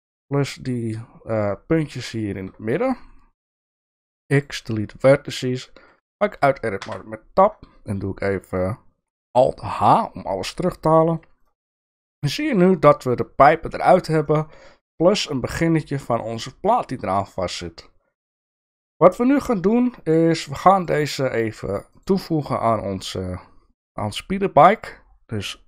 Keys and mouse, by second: 3.9 x, 5.4 middle click, 6.8 Tab, 9.7 alt+h, 10.5 middle click, 11.8 middle click, 14.3 middle click, 16.8-19.2 middle drag, 20.7 shift+click, 21.9 shift+click.